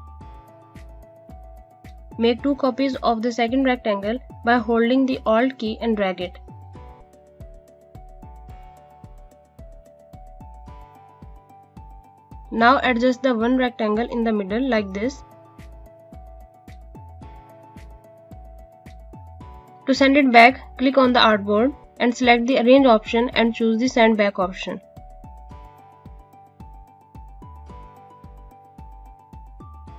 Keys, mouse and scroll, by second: 1.9 alt+click, 7.1 click, 9.8 alt+click, 11.6 alt+scroll down 1, 12.1 scroll down 1, 14.0 click, 16.7 space, 16.9 click, 17.4 space, 18.1 scroll up 1, 19.1 click, 21.6 click, 21.7 right click, 25.3 click, 28.0 right click.